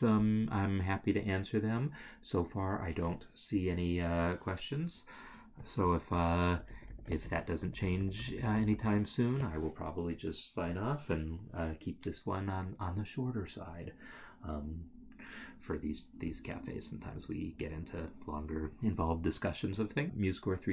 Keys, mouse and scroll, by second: 6.8 ctrl+z, 7.0 ctrl+z, 8.4 ctrl+z, 8.6 ctrl+z.